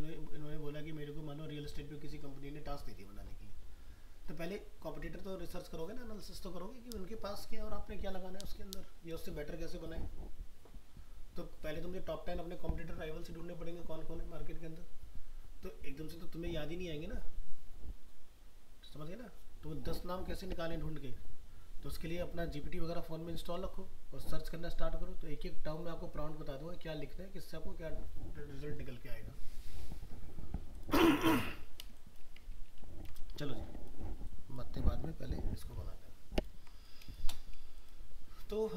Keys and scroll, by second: 32.7 ctrl+-, 35.8 ctrl+space.